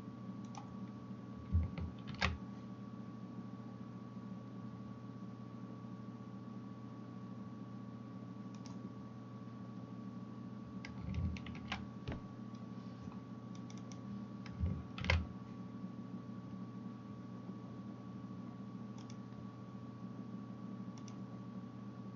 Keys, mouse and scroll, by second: 0.5 click, 2.1 ctrl+b, 8.9-22.1 middle drag, 11.5 ctrl+r, 15.0 ctrl+b.